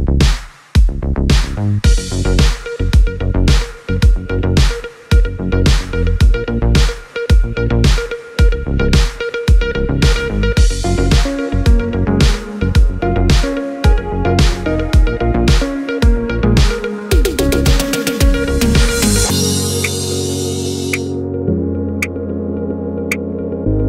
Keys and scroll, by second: 20.5-21.4 typing.